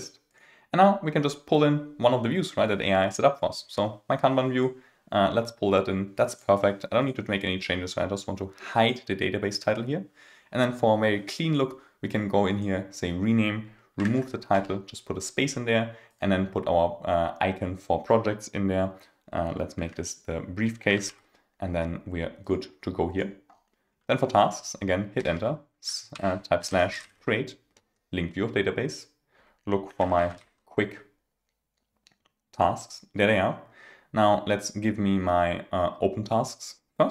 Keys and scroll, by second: 14.0 super+a, 25.2 Return, 27.7 Return.